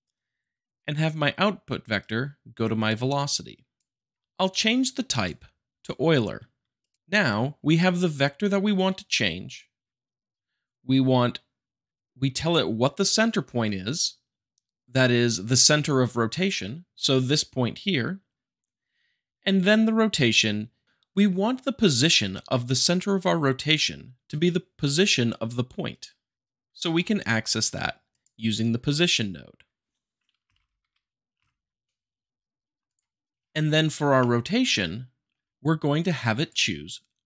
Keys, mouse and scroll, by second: 1.9-3.0 drag, 3.3-4.1 drag, 5.1-6.1 drag, 6.7 click, 25.9 click, 26.9 shift+a, 28.0-29.1 drag, 30.4 p, 30.4 o, 30.8 s, 31.3 Return, 32.8-33.3 drag, 34.1-35.1 shift+middle drag, 36.0-37.0 drag.